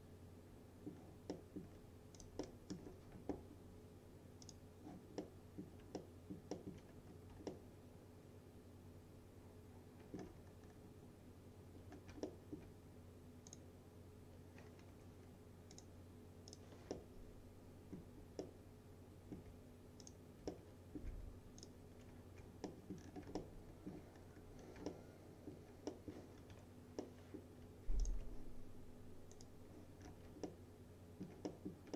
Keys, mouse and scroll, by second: 2.2 click, 2.5-3.1 middle click, 2.5 scroll, 4.5 click, 5.3-5.9 middle click, 6.0-6.9 alt+middle click, 7.0-7.4 scroll down 2, 7.6-10.4 alt+middle drag, 10.5-11.6 scroll up 2, 11.6 scroll up 1, 12.0 scroll down 1, 12.3 alt+middle click, 13.6 click, 15.0 F3, 15.8 click, 17.0-18.3 alt+middle drag, 18.5-19.4 alt+middle drag, 20.5 click, 20.6-21.2 alt+middle click, 21.7 ctrl+click, 22.7 middle click, 23.0 scroll down 1, 23.4 alt+scroll up 1, 23.4-24.1 alt+middle click, 24.2-24.7 scroll up 1, 24.7 scroll down 1, 24.9-25.5 alt+middle click, 26.4 scroll up 1, 26.6 F3, 27.1-27.7 middle click, 28.1 ctrl+click, 29.4 click, 30.1 scroll down 1, 30.5-31.5 alt+middle click.